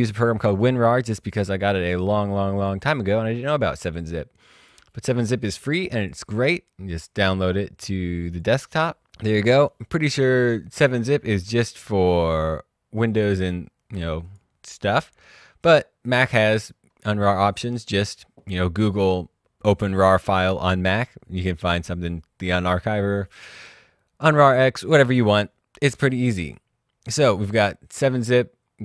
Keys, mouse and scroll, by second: 1.5 click, 6.0 click, 11.5-12.8 scroll down 1, 13.0 click, 16.6-16.9 scroll up 1, 16.9-17.6 scroll down 1, 21.2-22.4 scroll up 1, 25.3 click, 27.1 click.